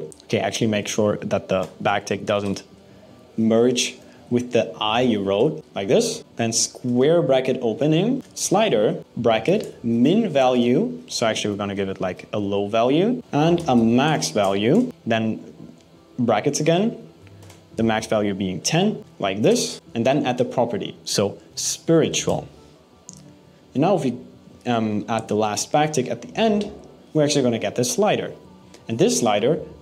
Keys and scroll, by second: 0.1 Left, 0.4 Right, 0.6 BackSpace, 2.1 shift+|, 3.3 Left, 4.0 Right, 4.5 BackSpace, 5.0 shift+|, 6.2 alt+6, 6.5 BackSpace, 6.8 alt+5, 12.0 ), 14.3 BackSpace, 14.9 (, 19.7 BackSpace.